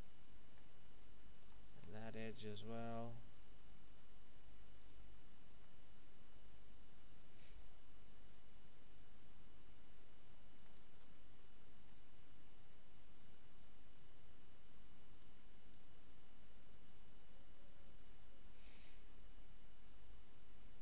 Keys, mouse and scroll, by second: 1.4 right click, 1.7 x, 2.2 right click, 2.7 click, 4.7 right click, 5.6 middle click, 10.9 ctrl+Tab, 14.0 click, 15.1 right click, 15.6 shift+right click.